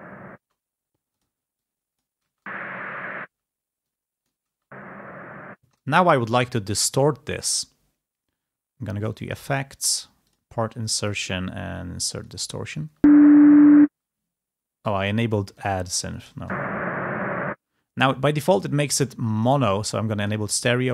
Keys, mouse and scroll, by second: 0.5 space, 1.7 click, 2.1 space, 4.2 click, 4.5 space, 6.8 click, 12.2 click, 17.4 space, 20.0 click.